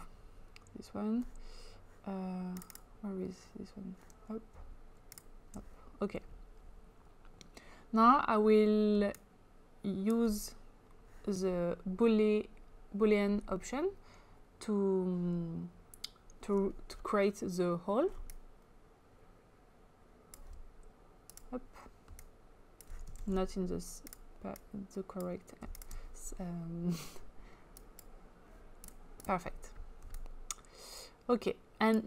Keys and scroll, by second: 23.2 ctrl+z.